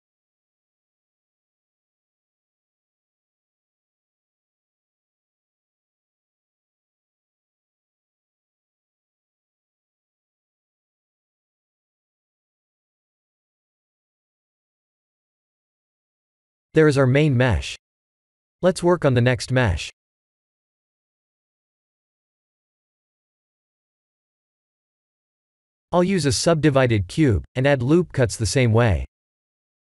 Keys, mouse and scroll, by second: 3.4 middle click, 4.8 Tab, 5.1 middle click, 5.8 right click, 6.8 middle click, 8.0 Tab, 9.0 ctrl+r, 12.6 ctrl+r, 15.0 Tab, 15.4 middle click, 23.8 KP_1, 24.1 KP_7, 25.2 click, 26.5 shift+a, 29.3 ctrl+3.